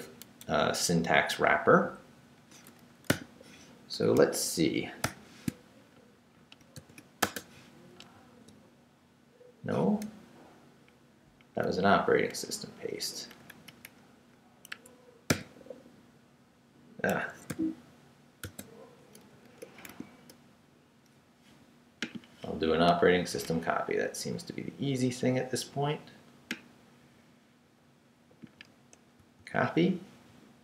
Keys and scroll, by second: 0.0 Right, 0.4 Left, 3.1 o, 5.0 shift+[, 6.8 shift+5, 7.2 shift+space, 8.0 super+v, 11.6 BackSpace, 13.3 BackSpace, 14.7 Escape, 15.3 p, 17.2 Escape, 17.5 u, 18.4 space, 19.3 Up, 19.9 shift+a, 29.2 super+c.